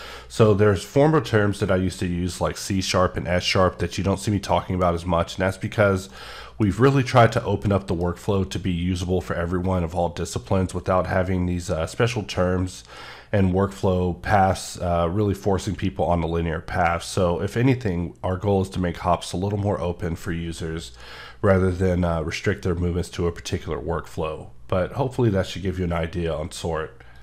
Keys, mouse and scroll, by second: 5.5 middle click, 5.6 scroll up 1, 6.1 middle click, 6.7-7.3 scroll down 2, 7.3 middle click, 8.7-9.2 scroll up 2, 9.4 scroll down 1.